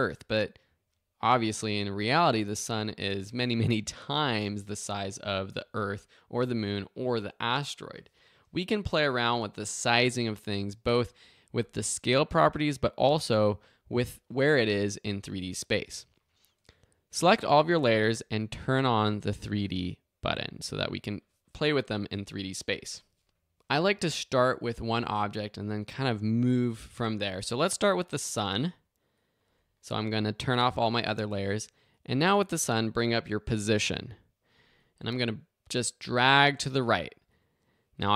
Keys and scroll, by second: 33.5 p.